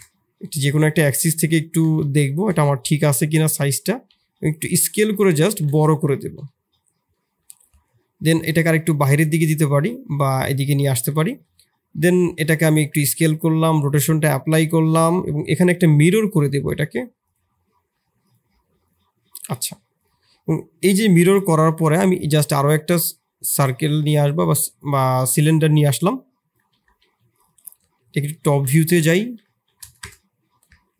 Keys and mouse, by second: 0.5 middle click, 1.2 KP_7, 2.0 shift+z, 2.1 shift+click, 2.9 s, 3.7 s, 5.1 middle drag, 5.4 shift+z, 5.7 middle click, 6.1 shift+middle click, 6.4 middle drag, 7.1 middle click, 8.4 click, 9.2 middle click, 10.9 click, 12.2 ctrl+a, 12.9 ctrl+a, 15.4-18.3 drag, 19.9 click, 20.2 shift+s, 20.8 middle click, 21.4 shift+a, 25.7-26.8 drag, 26.8 g, 28.0 KP_7, 28.4 shift+z, 29.1 r, 30.7 s.